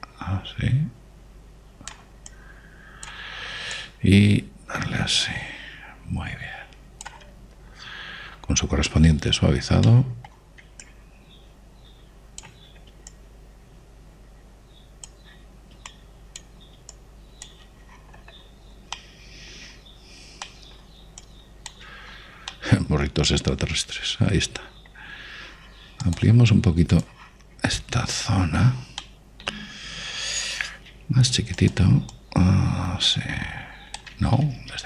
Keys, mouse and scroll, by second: 3.6-6.7 drag, 6.9 click, 8.5-10.4 scroll up 1, 10.4-11.1 scroll down 1, 11.1-12.1 middle drag, 12.1 click, 14.4 click, 17.2-20.0 drag, 19.2 middle click, 19.7 middle click, 20.2-23.4 middle drag, 22.5 click, 23.9 middle click, 24.2-25.6 middle drag, 27.3-29.0 drag, 29.3-32.1 middle drag, 32.2 f, 33.4 click.